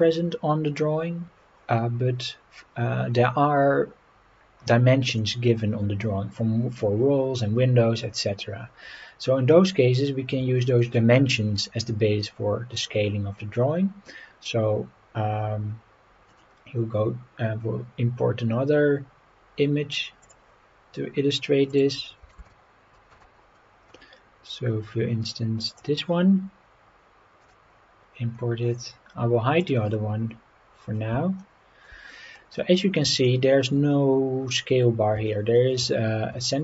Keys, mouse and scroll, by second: 5.1 click, 6.3 scroll up 3, 7.8-8.3 scroll down 3, 9.2 scroll down 1, 10.7-11.8 shift+middle drag, 16.3-20.7 drag, 28.3-29.0 scroll down 3, 29.6 click, 30.2 scroll down 1, 31.4-31.9 shift+middle drag, 32.1-32.6 scroll up 5, 33.3-33.6 shift+middle drag, 33.9-34.3 scroll up 3, 35.3-35.7 shift+middle drag.